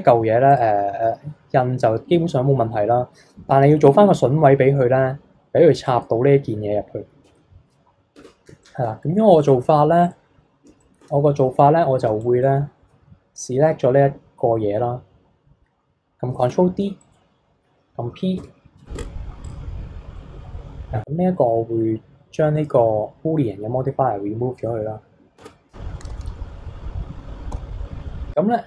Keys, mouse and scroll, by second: 0.5 click, 5.8 click, 7.2 KP_3, 7.8-8.2 scroll down 1, 8.2 Tab, 8.6-10.0 shift+middle drag, 10.0 click, 10.8 shift+middle click, 11.4-11.9 scroll up 1, 11.9 scroll up 1, 12.0 b, 16.4 shift+d, 18.4 p, 19.0 Tab, 19.4 click, 20.5-22.5 scroll down 20, 22.5-24.8 drag, 24.8-25.3 scroll up 2, 25.3 Tab, 26.0 a, 27.5 s.